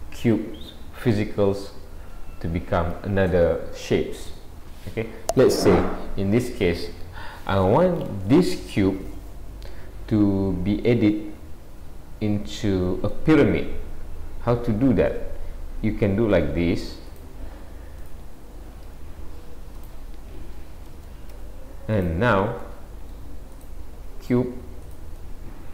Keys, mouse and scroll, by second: 9.4 scroll up 2, 10.9 middle click, 10.9-11.5 scroll up 1, 15.3 Tab, 16.0 middle click, 17.1 click, 18.0 click, 18.9 s, 20.9 g, 22.7 middle click, 23.6 click, 24.0 s, 25.2 middle click.